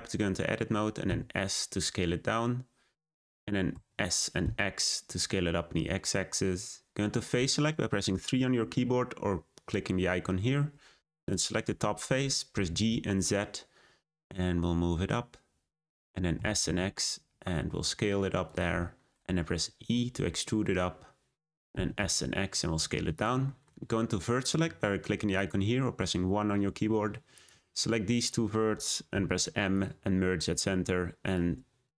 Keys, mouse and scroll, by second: 1.0 s, 3.7 s, 11.2 click, 11.6 middle click, 12.5 g, 16.3 s, 18.8 shift+middle click, 19.6 e, 21.7 s, 23.4 shift+middle click, 23.9-25.3 scroll up 2, 25.3-27.4 drag, 28.1 shift+click, 29.1 m, 30.4 click.